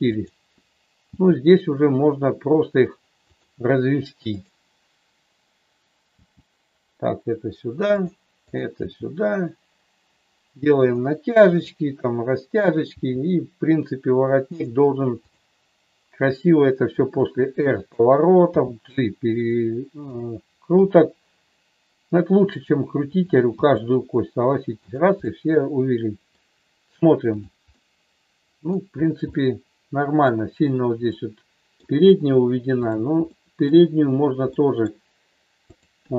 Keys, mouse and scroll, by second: 0.1-1.4 drag, 1.4 g, 3.3 click, 4.3-5.6 drag, 6.1 g, 7.8 click, 8.4-9.8 drag, 10.8 click, 11.6-12.9 drag, 13.3 g, 15.2-16.6 drag, 17.0 r, 18.5 g, 19.3 click, 21.5 r, 23.6 g, 25.2-26.5 middle drag, 27.2 click, 27.7-28.7 middle drag, 29.3 middle click, 31.1 middle click, 33.4 middle click, 34.6 middle click, 35.7-36.1 drag.